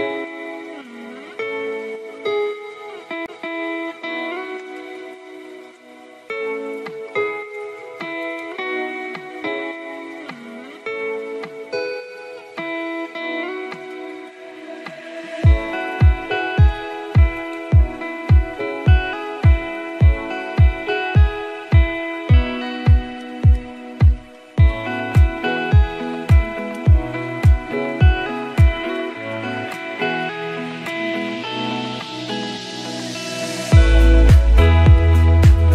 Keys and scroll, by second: 4.4 ctrl+t.